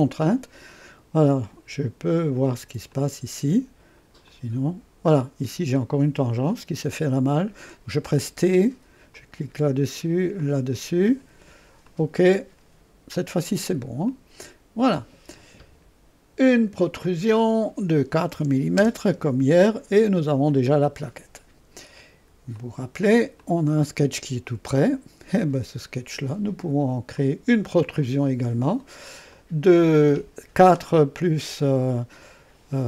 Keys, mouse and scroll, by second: 0.0 click, 1.5 click, 2.9 click, 4.3-5.7 drag, 8.1 t, 9.2 click, 10.4 click, 11.9 click, 14.1 click, 17.1 click, 18.1-19.1 typing, 22.6 click, 23.5-26.9 drag, 27.2 click, 29.3 click.